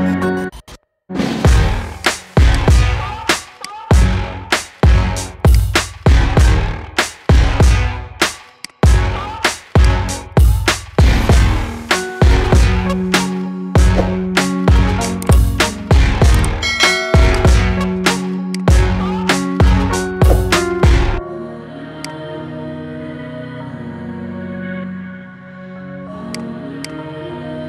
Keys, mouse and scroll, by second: 1.8 click, 2.3 click, 2.7 middle click, 3.5 shift+click, 4.5 Delete, 5.7 middle click, 6.2 scroll up 3, 6.5-8.4 shift+middle drag, 8.4 click, 9.2 click, 9.6 shift+click, 10.0 scroll up 3, 10.9 ctrl+b, 15.3 middle click, 15.8-16.6 scroll down 7, 16.6 shift+middle click, 17.2 click, 17.5 middle click, 18.3 shift+click, 18.7-19.0 scroll up 3, 19.0 shift+middle click, 19.9 ctrl+b, 22.1-22.4 scroll down 6, 22.4 middle click, 23.0-24.1 scroll up 3, 24.1 Tab, 24.3-24.8 middle drag, 24.8-25.4 scroll up 1, 26.1 click.